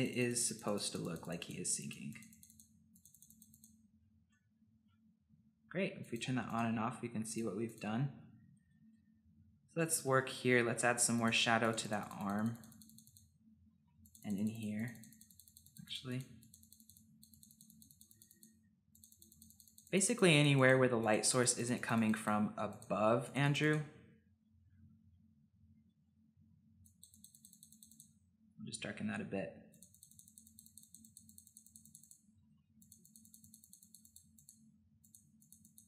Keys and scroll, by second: 9.8-10.8 typing, 13.6 ], 13.7 ], 13.8 ], 32.3 ], 32.5 ], 32.6 ].